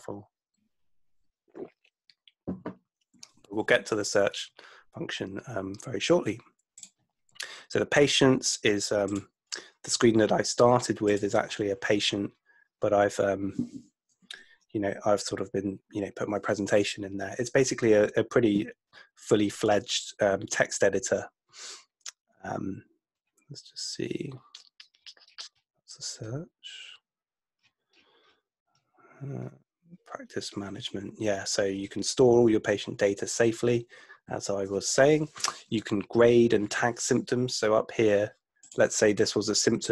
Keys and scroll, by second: 14.2 super+F2.